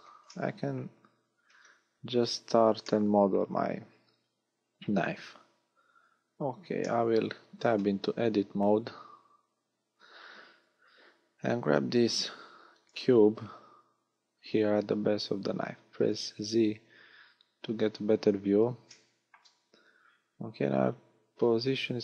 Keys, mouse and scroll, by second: 0.3 middle click, 1.9 KP_1, 2.8 shift+middle click, 3.7 scroll up 2, 5.7-6.1 scroll down 2, 6.8 shift+middle click, 7.9 Tab, 13.0 g, 16.1 click, 16.5 z, 17.8 scroll up 1, 18.9 shift+middle click, 19.8 scroll up 1, 20.2 g.